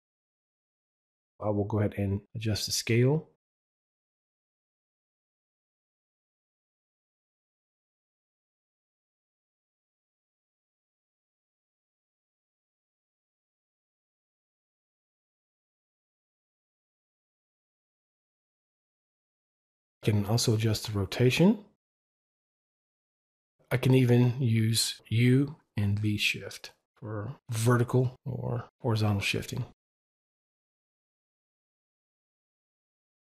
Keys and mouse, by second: 1.7 click, 27.8 click.